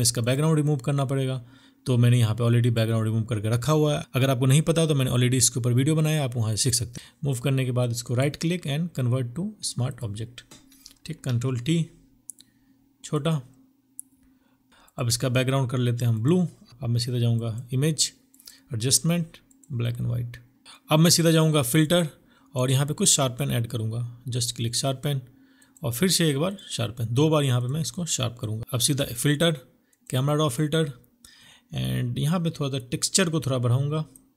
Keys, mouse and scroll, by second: 5.3 right click, 10.1 ctrl+t, 15.7 ctrl+BackSpace, 26.8 double click.